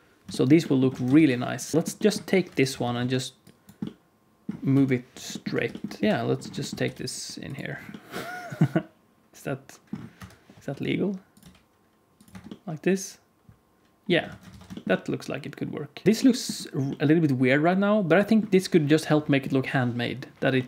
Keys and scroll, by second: 0.8 alt+a, 1.1 ctrl+s, 2.4 KP_1, 2.6 Tab, 2.9 alt+z, 4.6 KP_1, 5.6 g, 6.0 KP_3, 6.7 g, 10.1 KP_1, 10.6 r, 11.3 g, 12.2 Tab, 14.2 alt+a, 14.5 ctrl+s, 16.0 ctrl+s.